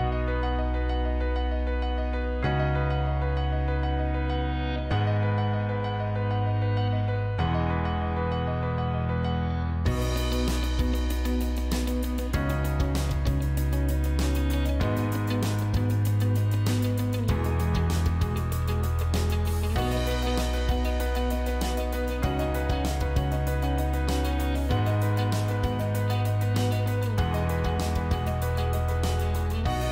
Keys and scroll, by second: 5.3 ctrl+z, 9.7 ctrl+z, 10.6 F2, 16.3 F4, 18.6 ctrl+z.